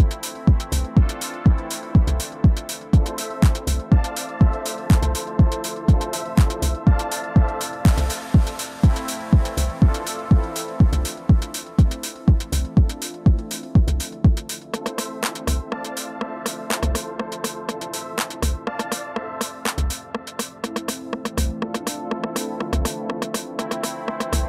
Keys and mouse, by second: 0.2 click, 0.7 alt+click, 1.9 alt+click, 3.4-4.2 alt+drag, 4.6 alt+click, 5.7 alt+middle click, 9.4 click, 11.0 click, 12.0 click, 14.1 alt+middle click, 16.2 click, 17.1 alt+click, 20.1-21.6 drag, 22.7 shift+i, 24.0 alt+click.